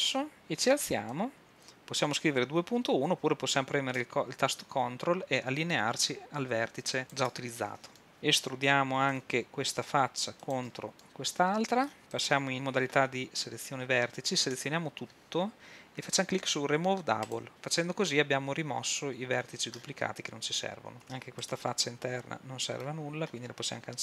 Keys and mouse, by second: 1.2-4.3 drag, 8.0 middle click, 8.3 click, 9.2 e, 10.6-12.0 drag, 12.2-14.4 drag, 14.4 a, 14.6 a, 21.0 a, 21.5 middle click.